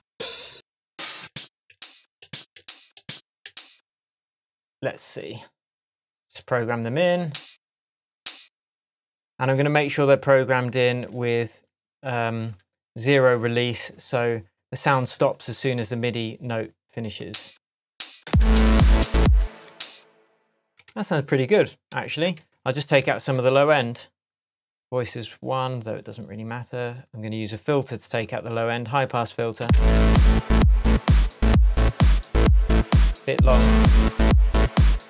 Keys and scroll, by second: 9.6 shift+Tab, 18.2 space, 19.4 space, 20.8 super+d, 20.9 super+d, 22.5 shift+super+Tab, 29.6 space.